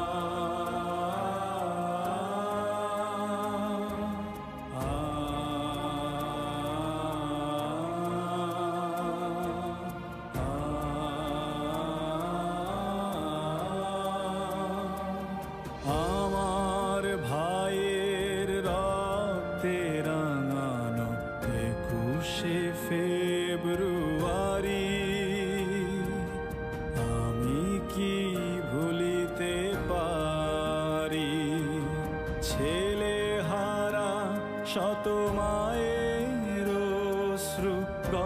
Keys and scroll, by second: 3.5 space, 4.3 space, 5.7 space, 7.5 space, 10.2 Up, 10.3 Up, 10.4 Up, 10.5 Up, 10.5 Up, 10.7 Up, 10.8 Up, 10.9 Up, 12.1 ctrl+shift+], 14.6 space, 15.9 ctrl+c, 16.2 ctrl+b, 19.8 ctrl+KP_Add, 19.9 ctrl+KP_Add, 20.0 ctrl+KP_Add, 20.2 ctrl+KP_Add, 23.1 ctrl+c, 23.4 ctrl+b, 26.1 Down, 27.2 Right, 28.6 ctrl+c, 28.8 ctrl+b, 31.6 Down, 31.8 Down, 32.1 Down, 32.5 Up, 33.0 Down, 33.4 Up, 36.2 ctrl+c, 36.5 b.